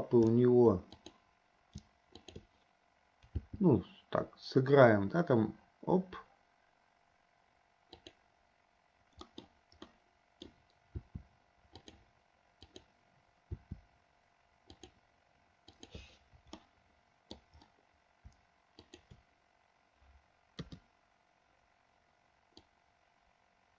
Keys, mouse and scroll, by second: 1.2 click, 2.4 shift+click, 3.7 g, 9.5 middle click, 10.2 middle click, 11.2 r, 12.9-13.2 drag, 13.7 r, 16.0 click, 17.0-17.8 middle drag, 19.2 shift+click, 21.1 KP_3, 23.0-23.7 drag.